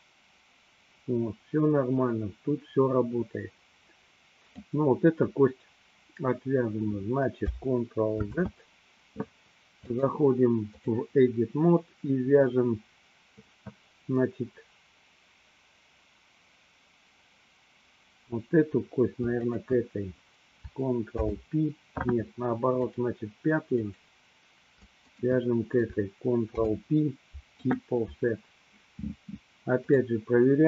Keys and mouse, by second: 8.3 ctrl+z, 9.9-10.9 drag, 21.0 ctrl+p, 23.8 click, 25.3 shift+click, 26.8 ctrl+p, 30.0-30.6 drag.